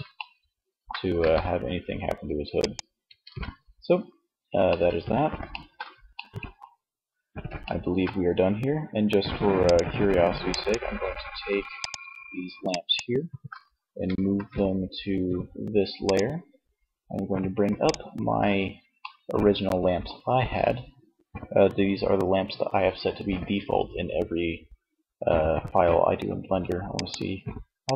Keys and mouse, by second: 0.3 g, 1.7-3.5 drag, 2.5 ctrl+z, 8.6-13.6 right drag, 13.6 shift+m, 16.8 click, 17.9 middle click, 25.9-27.9 drag.